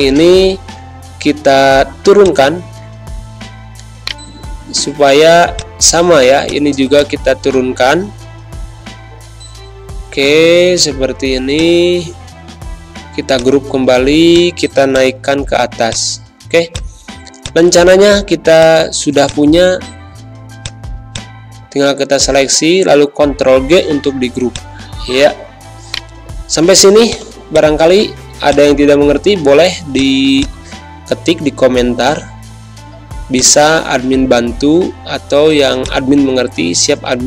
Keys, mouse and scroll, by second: 0.6 ctrl+g, 2.2-4.0 drag, 4.0 right click, 10.1 Up, 11.5 shift+click, 12.4 ctrl+g, 13.3 click, 17.0 z, 17.3-19.0 drag, 19.0 space, 19.2 click, 19.5 space, 20.5-23.1 drag, 23.1 ctrl+g, 24.5-25.8 alt+shift+drag, 25.8 right click, 31.7 ctrl+g, 33.3-34.5 shift+drag, 34.5 ctrl+0, 35.8 click.